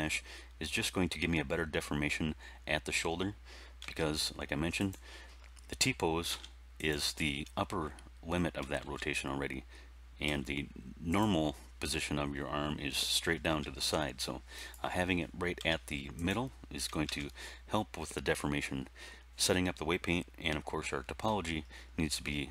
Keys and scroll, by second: 3.7 r, 6.2 r, 8.8 alt+r, 10.2 r, 13.4 r, 15.5 r, 17.0 alt+r.